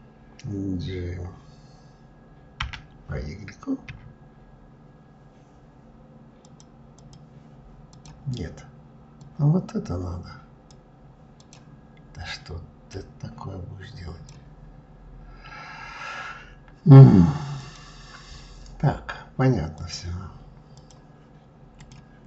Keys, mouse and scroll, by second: 6.1-7.7 drag, 8.9 click, 11.1 click, 12.5 drag, 17.3 click, 19.4-21.5 drag.